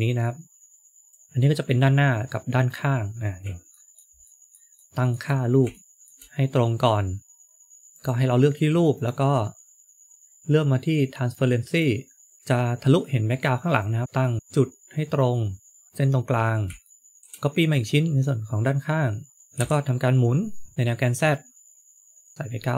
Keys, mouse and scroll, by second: 2.8-3.6 scroll up 6, 3.6 shift+middle click, 4.1 shift+middle click, 4.8 shift+middle click, 5.3 scroll up 1, 5.6 shift+middle click, 7.8 click, 8.8 click, 11.6 click, 13.7 click, 15.9-16.3 scroll down 5, 16.8 shift+middle click, 16.8 scroll down 4, 17.2 shift+d, 19.5 r.